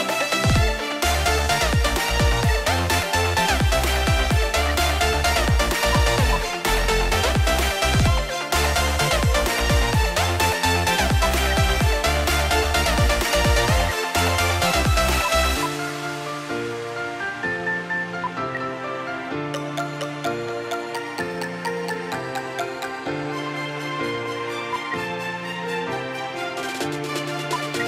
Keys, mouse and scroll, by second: 2.4 Delete, 4.1 right click, 4.5 F2, 6.1 shift+click, 8.2 scroll down 1, 10.6 right click, 11.3 right click, 11.3 shift+F2, 13.3 right click, 13.7 F2, 15.2 shift+click, 18.4 shift+F2, 23.2 double click, 24.8 ctrl+z, 25.7 double click, 27.6 ctrl+z.